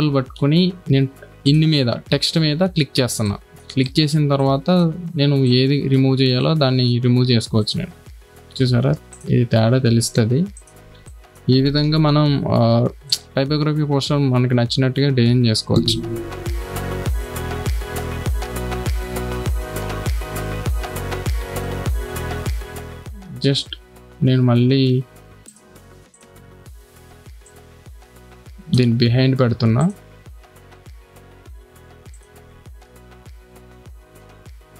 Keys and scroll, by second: 2.9 space, 6.3 x, 8.2 ctrl+d, 11.0 space, 11.8 ], 22.5 space.